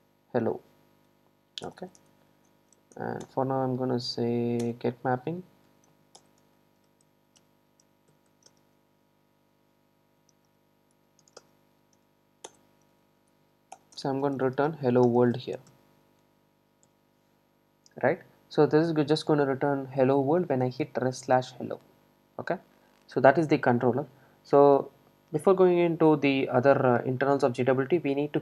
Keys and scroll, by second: 0.0 Return, 3.3 Return, 13.8 Return.